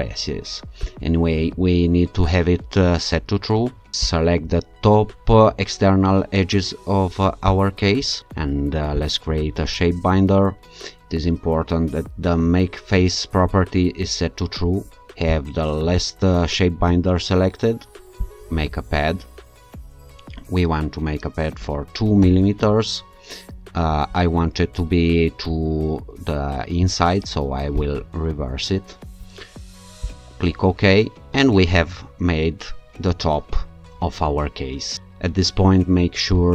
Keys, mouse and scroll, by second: 0.8 click, 4.1 click, 7.5 ctrl+click, 9.0 click, 15.3 click, 18.2 click, 21.6 2, 22.2 Return, 27.8 click, 30.1 click, 36.4 alt+click.